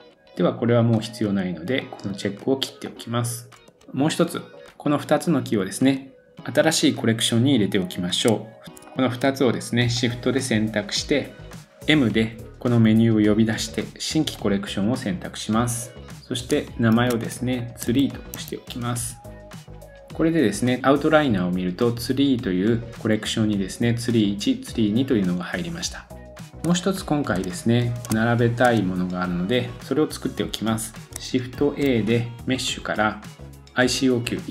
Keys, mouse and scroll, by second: 0.9-8.6 drag, 3.8-4.2 shift+scroll down 1, 8.6 shift+middle click, 8.7 click, 9.0-9.9 shift+middle drag, 9.9 shift+click, 10.0-10.8 shift+middle drag, 11.9 m, 16.5 shift+click, 26.4 scroll down 2, 26.6-27.3 shift+middle drag, 28.1-34.5 shift+middle drag, 28.6-29.7 scroll up 1, 29.7-31.1 scroll up 1, 31.6 shift+a, 33.6-34.5 drag.